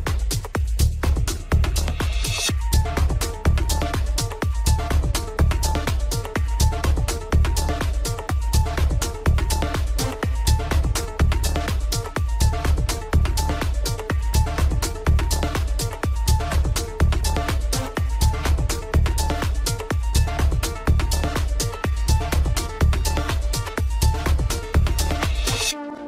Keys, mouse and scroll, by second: 0.0-0.7 drag, 4.0-6.0 drag, 6.0-7.3 scroll down 3, 7.3-8.8 middle drag, 8.8-9.2 scroll up 2, 9.2-9.8 shift+middle drag, 9.8-11.5 scroll up 1, 11.5-14.3 drag, 14.3-14.8 scroll down 2, 14.8-16.4 shift+middle drag, 16.4 Tab, 20.7-21.0 scroll up 2, 21.0-22.5 middle drag, 22.5-24.4 scroll up 1, 24.4-26.0 drag.